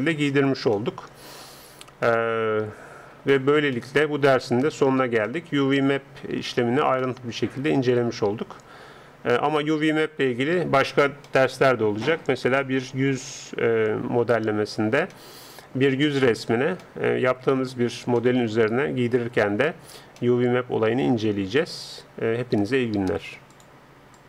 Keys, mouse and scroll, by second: 18.6-20.2 middle drag, 20.4-22.9 middle drag.